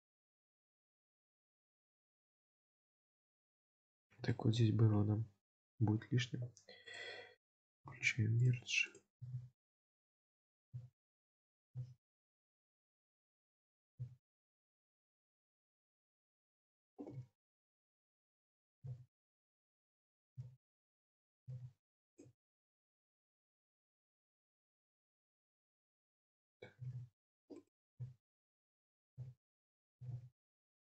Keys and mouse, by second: 1.2-2.9 middle drag, 3.1 Tab, 3.9 Tab, 4.4 shift+middle click, 4.9 1, 6.9 click, 7.9 g, 8.9 click, 10.2 click, 11.5 click, 12.5 click, 13.6 click, 14.8 shift+middle click, 15.5 middle click, 22.4 ctrl+x, 23.1 ctrl+z, 25.7 shift+middle click, 27.7 click, 29.8 click.